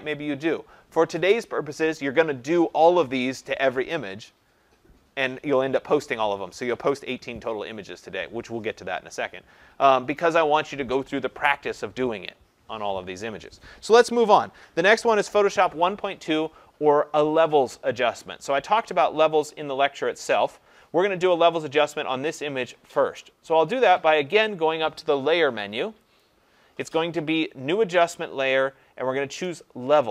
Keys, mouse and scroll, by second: 26.2 click.